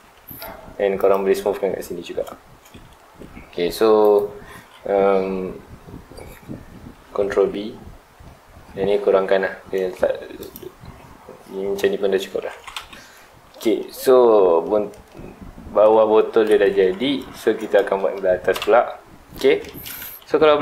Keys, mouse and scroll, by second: 0.1 2, 1.0 alt+click, 3.0 ctrl+r, 4.1 right click, 7.0 ctrl+b, 10.5 click, 11.9-12.2 scroll up 2, 12.2 middle click, 12.5 alt+a, 12.7 Tab, 12.9-13.2 scroll down 2, 13.2 middle drag, 13.4 alt+a, 13.7-17.0 middle drag, 17.0 scroll down 2, 17.2-18.5 shift+middle drag, 18.5 KP_1, 18.6 KP_0, 19.6 shift+middle click, 19.9 alt+space.